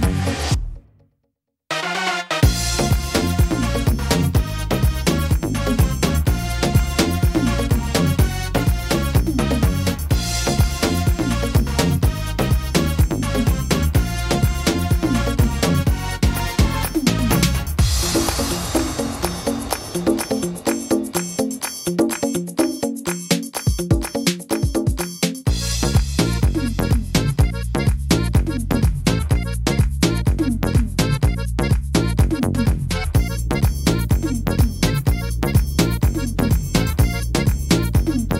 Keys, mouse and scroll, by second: 4.5 middle click, 4.5 s, 5.4 s, 7.1 middle click, 8.1 middle click, 9.6 click, 11.5 middle click, 14.3 s, 15.8 middle click, 16.7 middle click, 17.3 scroll up 3, 17.7 middle click, 18.4 right click, 18.7 middle click, 19.7 click, 21.1 shift+middle click, 21.6 middle click, 23.2 shift+middle click, 23.8 middle click, 26.4 scroll up 3, 26.9 shift+middle click, 27.6 middle click, 28.6 shift+middle click, 29.5 shift+middle click, 30.0 middle click, 32.1 right click, 32.6 shift+right click, 33.3 right click, 34.3 right click, 34.7 right click, 35.2 shift+right click, 36.1 click, 37.9 middle click.